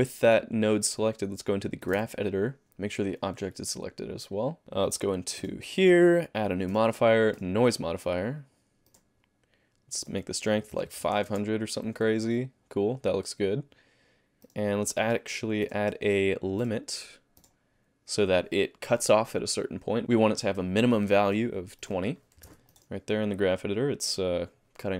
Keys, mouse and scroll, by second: 0.3 click, 1.8 click, 3.2 click, 4.8 click, 5.4 click, 6.7 click, 10.0 click, 10.9 KP_0, 11.3 space, 12.1 alt+a, 14.4 click, 15.6 click, 17.4 click, 21.3 click, 22.7 alt+a, 22.7 middle click, 22.7 scroll down 10.